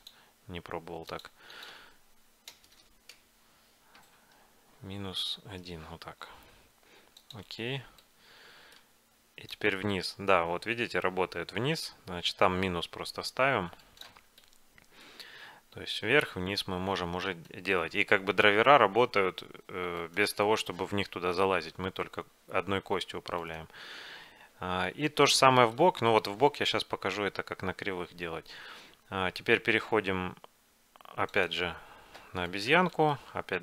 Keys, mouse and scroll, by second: 2.8 BackSpace, 2.9 BackSpace, 8.1-10.0 middle drag, 9.6-13.6 drag, 14.3 middle click, 15.4 middle click, 15.4 g, 18.0 g, 21.2-23.0 middle drag, 21.7 g, 25.4-27.2 middle drag, 31.5 click, 33.1 middle click.